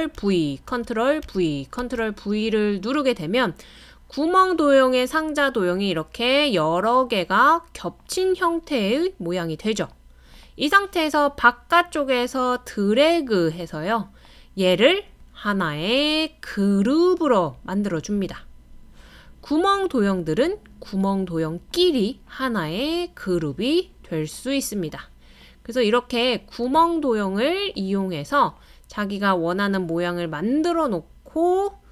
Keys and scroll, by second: 0.2 super+v, 0.7 super+v, 1.2 super+v.